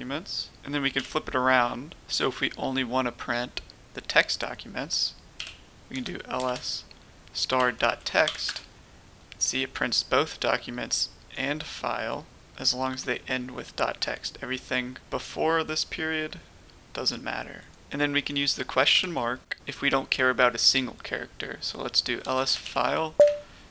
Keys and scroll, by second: 0.9 typing, 5.3-6.4 typing, 7.5-8.2 typing, 8.4 Return, 18.8 typing, 22.2-22.7 typing, 23.1 Tab.